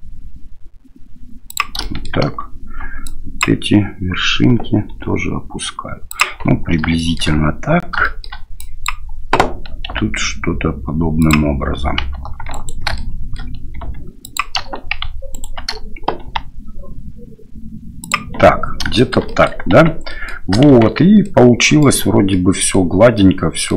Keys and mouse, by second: 1.9 shift+middle click, 3.1 click, 4.9 g, 7.1 shift+middle click, 8.0 shift+middle click, 8.6 click, 9.9 g, 12.5 alt+right click, 12.9 shift+middle click, 13.8 g, 15.3 alt+right click, 16.2 g, 19.0 shift+click, 19.2 click, 19.7 Tab, 20.1 middle click, 20.7 shift+z, 20.7 shift+x, 21.2 click, 22.3 click, 22.7 middle click, 23.2 click.